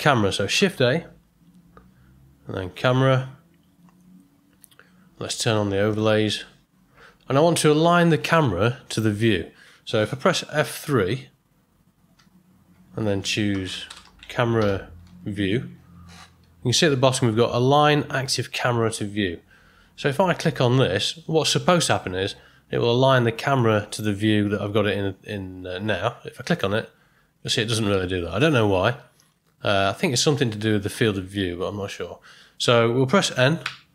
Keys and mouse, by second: 0.7 shift+a, 5.9 click, 12.1 F3, 33.6 n.